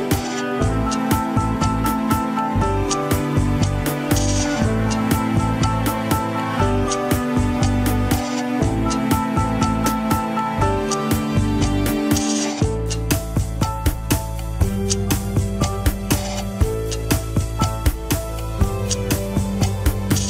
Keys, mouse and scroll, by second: 0.7-1.9 drag, 1.9 scroll down 3, 2.3 shift+z, 2.9 ctrl+Tab, 3.3 alt+z, 3.6 scroll down 1, 3.9 shift+z, 4.4 click, 4.7-5.2 scroll up 3, 5.0 shift+middle click, 5.7 ctrl+Tab, 5.8 click, 6.4 scroll up 1, 6.8 g, 8.6 scroll down 4, 8.7 KP_3, 9.1 scroll up 3, 9.6 KP_1, 10.4 ctrl+Tab, 11.2 shift+click, 11.6 ctrl+Tab, 13.4 ctrl+click, 13.9-15.1 middle drag, 15.1 ctrl+click, 15.4 scroll down 2, 15.8-18.3 middle drag.